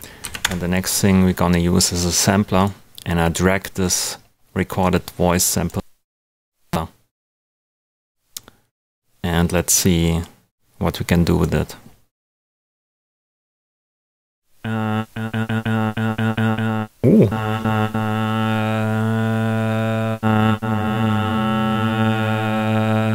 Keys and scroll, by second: 0.0-0.2 typing, 0.4 Return.